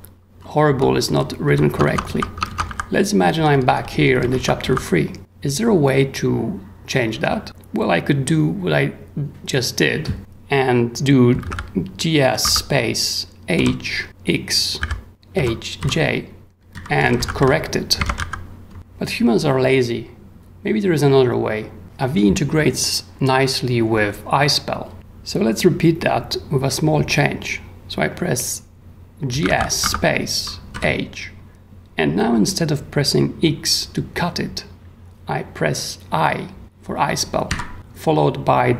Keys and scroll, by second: 0.0-1.0 typing, 1.8 ctrl+j, 1.8 ctrl+w, 3.3 k, 3.9 k, 4.4 w, 11.1-12.4 typing, 13.5 h, 14.8-19.3 typing, 18.7 ctrl+w, 29.1-30.7 typing, 37.5 i.